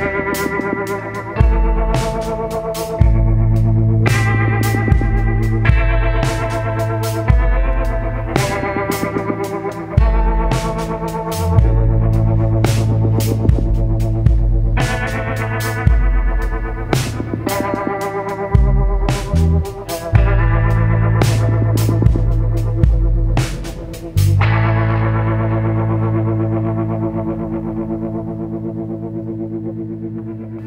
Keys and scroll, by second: 22.2 ctrl+z, 25.2 ctrl+z, 25.6 ctrl+z, 27.0 ctrl+z, 28.4 ctrl+z, 28.7 ctrl+z, 29.2 ctrl+z.